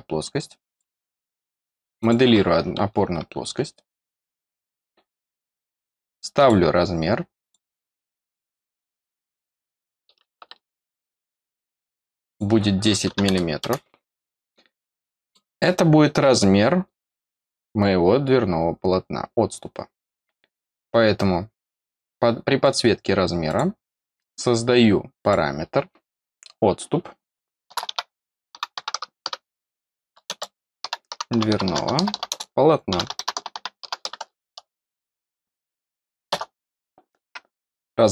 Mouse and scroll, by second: 0.6 click, 1.9 click, 4.3 click, 6.3 click, 7.4 click, 8.7 click, 9.6 click, 11.2 click, 12.2 click, 14.3 middle click, 14.6 middle click, 14.9-22.6 middle drag, 22.6 click, 23.4 click, 25.1 click.